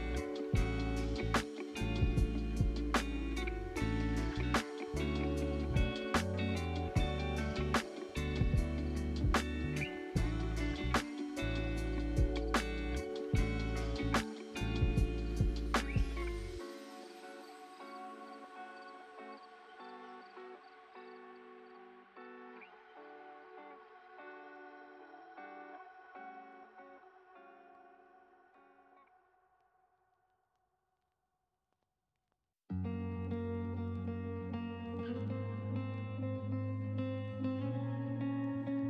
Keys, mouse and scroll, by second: 0.5 click, 3.1 click, 4.4 click, 7.1 click, 9.4-14.8 middle drag, 18.7 click, 19.3-19.6 scroll up 2, 20.2 click, 22.6 click, 25.9 click, 26.4-28.2 middle drag, 28.2 click, 28.9 scroll down 4, 29.9 click, 32.8-35.3 middle drag, 35.3 ctrl+c, 35.4 ctrl+v, 36.0 click, 38.5 ctrl+c, 38.6 ctrl+v.